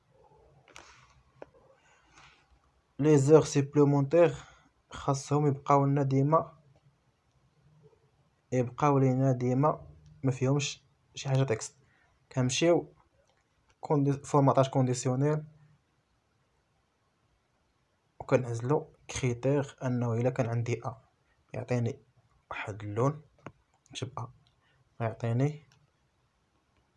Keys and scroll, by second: 5.9 a, 6.8 Return, 25.5 a, 26.7 BackSpace.